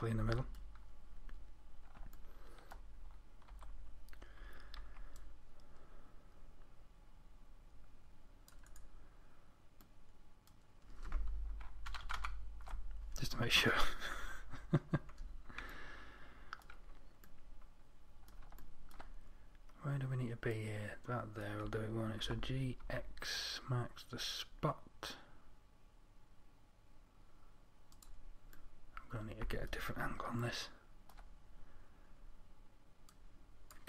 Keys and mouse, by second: 3.9 a, 4.8 z, 5.2 c, 14.7 z, 22.7 g.